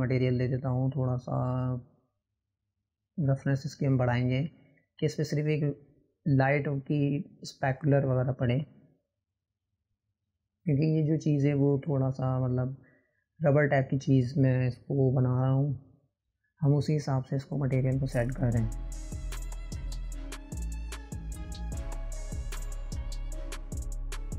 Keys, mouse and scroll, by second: 2.7-7.4 drag, 11.3 click, 15.1-16.5 drag, 20.1-23.2 drag.